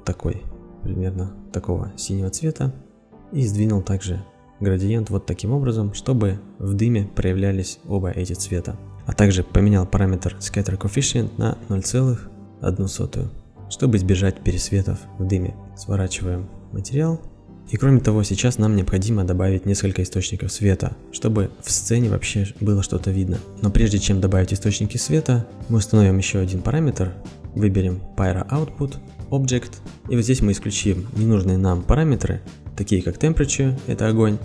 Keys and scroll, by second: 12.3 Insert, 12.4 KP_0, 12.7 KP_1, 12.9 Return.